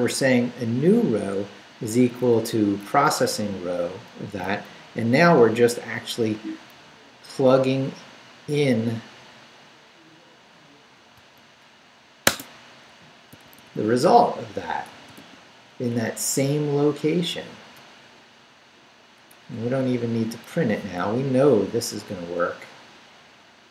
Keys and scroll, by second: 2.4 Left, 2.8 Right, 4.5 Down, 5.4 Right, 11.2-15.7 typing, 15.9 Up, 17.7 BackSpace, 19.3 BackSpace, 21.0 Down, 23.4 Left.